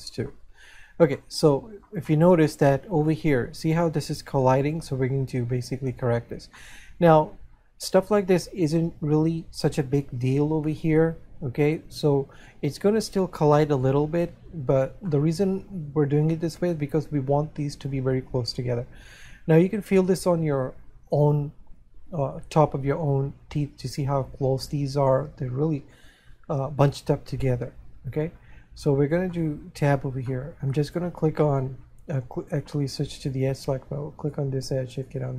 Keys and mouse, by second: 1.6 middle click, 7.0 middle click, 15.6 middle click, 27.4 middle click, 29.6 middle click, 35.0 right click.